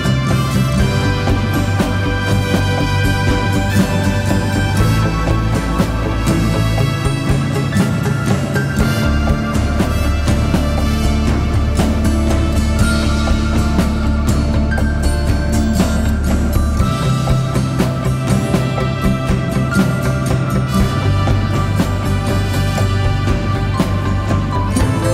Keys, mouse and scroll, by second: 3.3 double click, 14.2 typing, 20.1 typing.